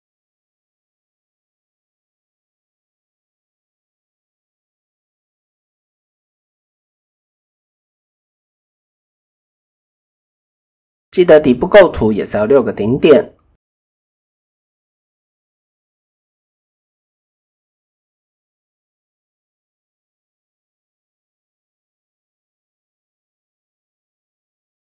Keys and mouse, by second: 0.1 shift+middle click, 1.1 shift+middle click, 2.1 shift+click, 4.6 click, 7.4 ctrl+click, 10.9 ctrl+shift+b, 13.3 click, 14.0 click, 15.2 s, 17.1 click, 18.1 s, 19.4 KP_3, 21.3 click, 23.7-24.3 drag, 24.5 s.